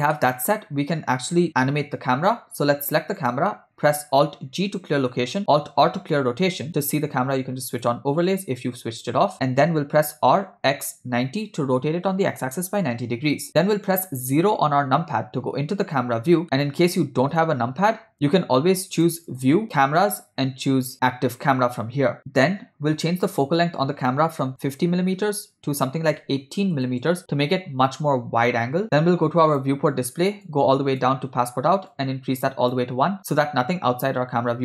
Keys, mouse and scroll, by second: 0.2-1.4 middle drag, 3.2 click, 5.2 alt+g, 6.1 alt+r, 7.8 click, 10.6 r, 14.5 KP_0, 16.4 ctrl+middle click, 17.4 click, 19.0 click, 19.3-22.2 drag, 23.3-27.0 drag, 29.5 click, 30.5 click, 31.9 click.